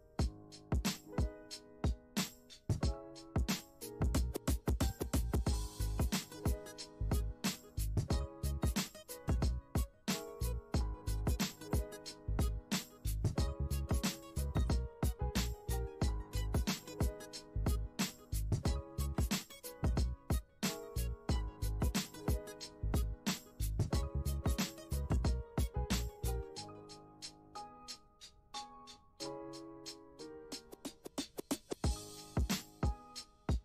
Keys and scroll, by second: 15.0 space, 20.1 space, 32.0 space.